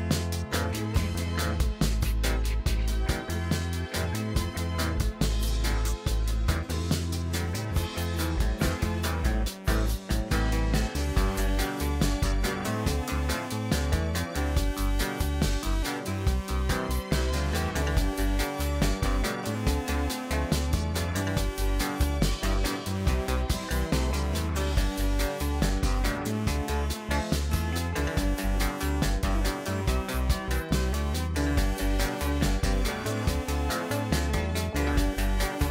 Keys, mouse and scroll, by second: 2.2 alt+shift+click, 2.9 alt+shift+click, 3.0 alt+shift+click, 3.6 alt+shift+click, 4.3-5.0 middle drag, 5.0 scroll down 1, 5.2-8.5 middle drag, 8.5 e, 14.4 e, 17.9-18.2 scroll down 1, 18.2-20.7 middle drag, 20.9 s, 22.8-25.3 middle drag, 25.3-25.8 scroll up 1, 25.8-26.8 shift+middle drag, 26.8 click, 28.6-31.1 drag, 33.9-35.7 middle drag.